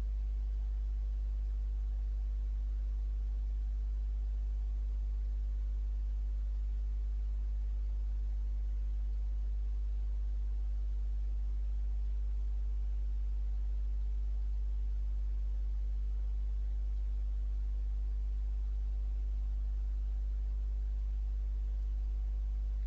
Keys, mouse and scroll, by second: 1.5-5.5 drag, 6.6-9.4 drag, 12.5 ctrl+scroll down 2, 13.5 ctrl+scroll up 2, 14.5 ctrl+click, 16.9 click, 21.8 space.